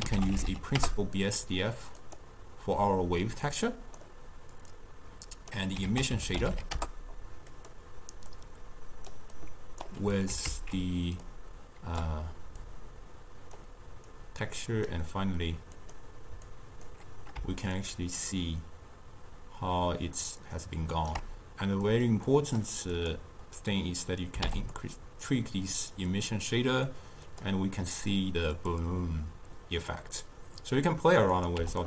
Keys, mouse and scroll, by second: 3.5 click, 4.8 drag, 5.9 ctrl+a, 8.3-9.5 drag, 10.2 click, 10.7 ctrl+x, 11.3 click, 12.6 click, 14.2 drag, 15.8 click, 16.6 click, 17.8-20.9 shift+drag, 22.0 click, 22.3-24.8 drag, 27.4 click, 28.6 click, 31.4 click.